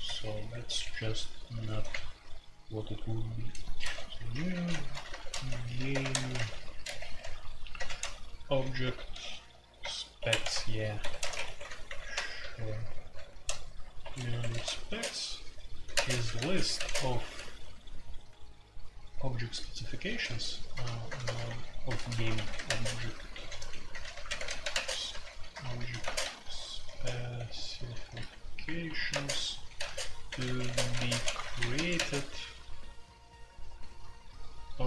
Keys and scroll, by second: 0.0-1.7 typing, 0.0 Return, 0.2 Return, 1.9 Return, 3.6-16.7 typing, 11.0 Escape, 19.4-31.9 typing.